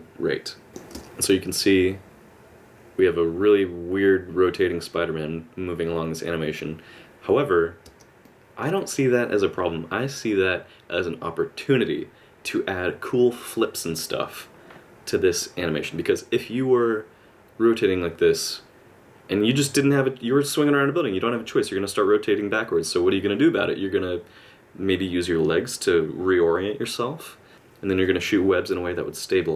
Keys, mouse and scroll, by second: 0.7 click, 0.7 middle click, 0.7 space, 0.9 space, 7.8 space, 8.2 middle click, 15.4 click.